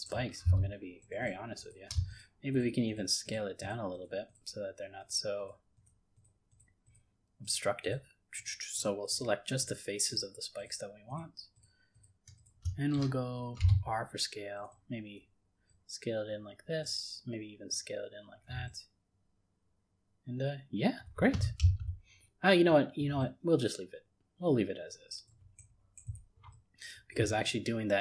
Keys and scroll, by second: 21.6 ctrl+z.